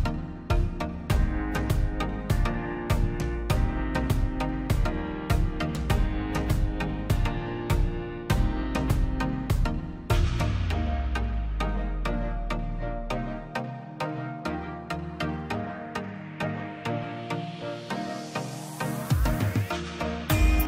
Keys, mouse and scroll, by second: 0.5-1.1 scroll up 1, 1.1 click, 2.0 scroll down 1, 2.4 click, 2.7 click, 3.3 Delete, 3.5-4.0 scroll down 1, 4.2 middle click, 4.5-4.8 scroll up 1, 5.0 middle click, 5.6 scroll down 1, 6.2 click, 7.0 right click, 7.8 click, 9.2 scroll down 1, 9.8 middle click, 10.4 click, 11.4 right click, 11.9 click, 12.0 click, 12.9 right click, 13.9 click, 14.6 right click, 15.4 click, 16.8 click, 17.2 scroll up 1, 17.4 click, 17.6 scroll down 1, 17.8 middle click, 18.2-18.7 scroll up 1, 18.8 click, 19.1 middle click, 19.4 scroll down 1, 20.0 click.